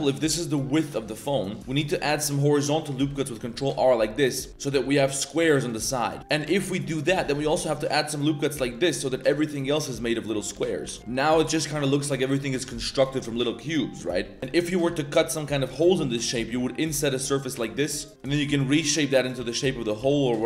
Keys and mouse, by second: 0.6 g, 1.5 click, 1.6 a, 4.4-6.2 typing, 4.6 drag, 6.0 click, 6.7 drag, 7.2 ctrl+r, 9.0 click, 9.7 click, 10.2 middle click, 10.5 ctrl+z, 10.8 ctrl+r, 11.0 shift+middle drag, 11.2 middle drag, 11.5 shift+middle drag, 12.0 middle click, 14.4 3, 14.4 a, 14.5 a, 14.7 click, 15.3 ctrl+shift+click, 15.7 click, 16.3 i, 17.6 drag, 18.1 shift+1, 18.2 shift+click, 18.4 s, 19.3 s.